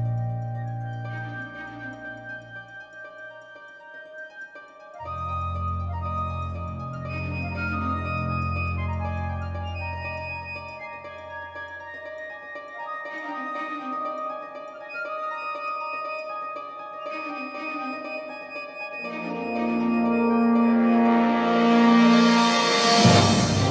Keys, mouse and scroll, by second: 0.4-4.1 drag, 3.7-5.5 right drag, 4.8 g, 6.1 e, 6.4-10.4 drag, 6.5 g, 8.1 r, 9.2 e, 9.6 g, 10.6 click, 11.4 s, 14.4-16.8 middle drag, 15.6 s, 18.5 s, 20.3-23.7 drag, 22.9-23.7 middle drag, 22.9 right click.